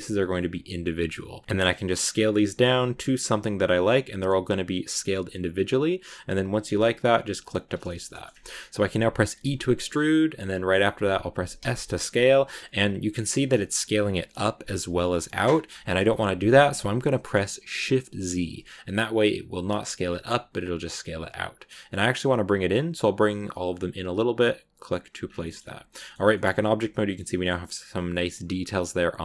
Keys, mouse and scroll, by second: 7.6 middle click, 8.5-9.3 scroll up 1, 9.3 e, 25.1 scroll down 2, 25.3 middle click, 25.7 Tab, 26.2 scroll up 2, 26.4-29.2 middle drag.